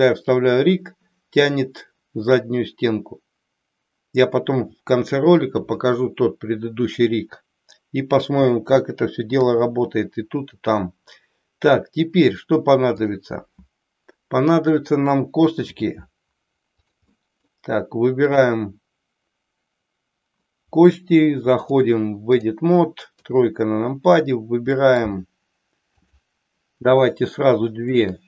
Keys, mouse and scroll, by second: 9.3 KP_3, 13.0 click, 15.5 e, 16.7 click, 17.2 middle click, 21.6-22.5 drag, 23.1 KP_3, 24.7 middle click, 26.0 click, 28.0 shift+click.